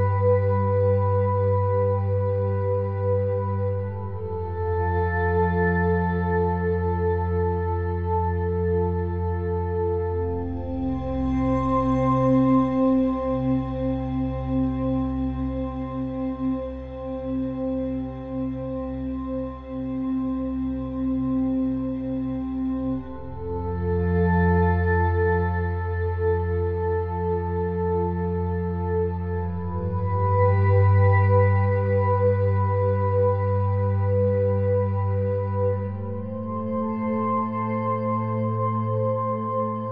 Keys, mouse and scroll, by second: 4.3 Tab, 5.6-7.4 drag, 7.1 ctrl+g, 9.3-10.5 drag, 10.8 click, 13.5-14.8 middle drag, 14.8-18.3 drag, 18.6 ctrl+j, 20.0-21.0 middle drag, 21.9-23.8 middle drag, 23.2-25.0 drag, 24.6 KP_3, 31.4 KP_1, 33.6-35.4 drag, 36.6-38.5 drag.